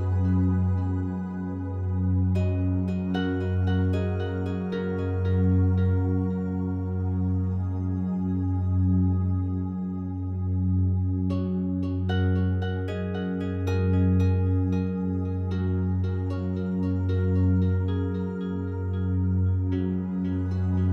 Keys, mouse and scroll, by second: 0.0-0.8 typing, 1.5-3.4 drag, 2.1 typing, 3.2-7.3 typing, 8.2-12.0 drag, 10.5 typing, 12.1 click, 14.3-17.2 alt+drag, 14.4 typing, 17.3-20.5 ctrl+alt+drag, 20.5 n.